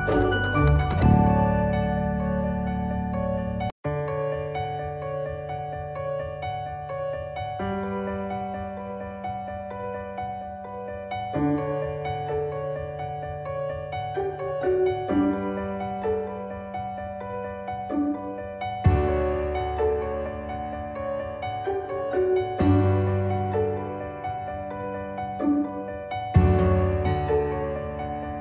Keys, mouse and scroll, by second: 0.9 click, 2.7 ctrl+z, 5.0-5.3 click, 12.3-12.9 click, 15.5-19.8 drag, 22.9 click.